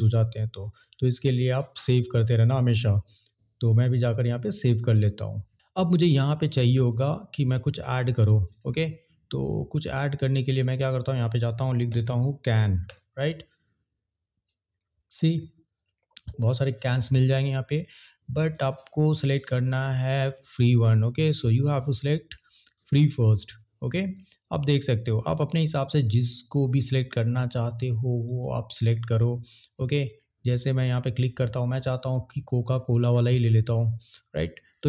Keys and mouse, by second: 6.8-8.5 drag, 10.6-12.9 drag, 18.5-23.2 drag, 28.4 click, 30.1 click, 30.4 click, 33.0 click.